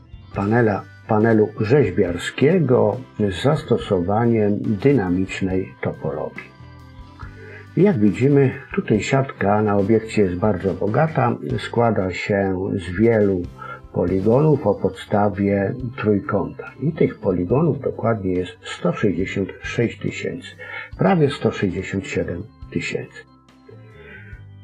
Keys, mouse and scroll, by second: 0.1 click, 0.2 click, 1.1-1.5 scroll down 1, 1.5 scroll up 1, 2.2 scroll down 1, 2.3-3.3 scroll down 1, 5.7-7.1 scroll up 2, 7.1-7.6 scroll down 2, 7.6-9.0 scroll up 1, 11.8-15.0 scroll up 2, 22.7-24.6 scroll down 2.